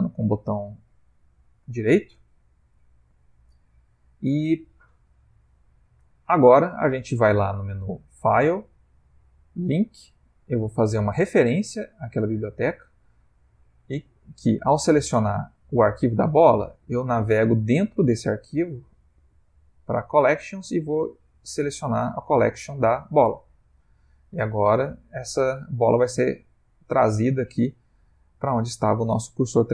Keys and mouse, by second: 5.9 middle click, 7.6 click, 23.6 ctrl+middle click, 28.1 ctrl+middle click, 29.1 middle click.